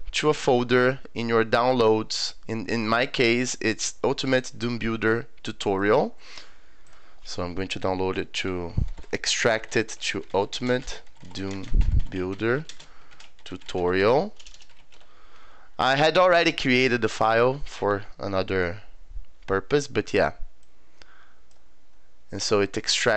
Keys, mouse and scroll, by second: 2.7 click, 4.3 click, 5.8 click, 6.9 click, 8.6-15.3 typing, 20.6 click.